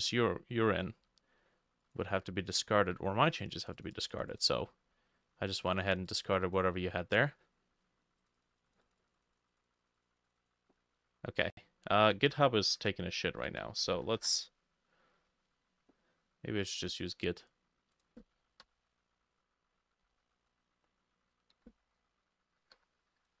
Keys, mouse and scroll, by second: 0.0-2.0 drag, 3.9-12.2 drag, 13.5 Escape, 14.2 ctrl+shift+Escape, 18.7 Delete, 21.9-23.4 super+drag, 22.6 g, 22.8 i, 22.9 t, 23.1 h.